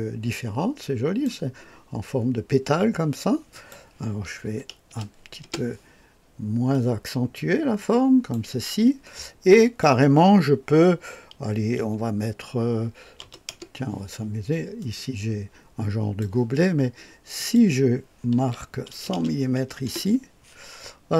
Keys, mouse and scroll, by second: 3.5 click, 4.5 KP_5, 4.9 KP_0, 5.4 Return, 6.7-9.1 drag, 9.6 click, 13.0 KP_6, 13.3 KP_0, 13.5 Return, 14.8-18.4 drag, 18.4 KP_1, 18.9 KP_0, 19.2 KP_0, 19.8 Return.